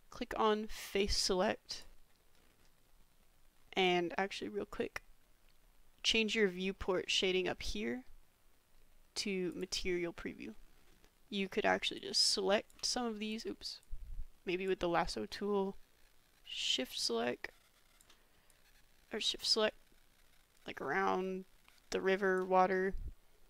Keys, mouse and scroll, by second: 1.0 click, 2.4 middle click, 9.5 click, 10.5 middle click, 12.0 shift+middle click, 13.3-14.8 drag, 15.4-18.0 shift+drag, 18.6-22.4 shift+drag.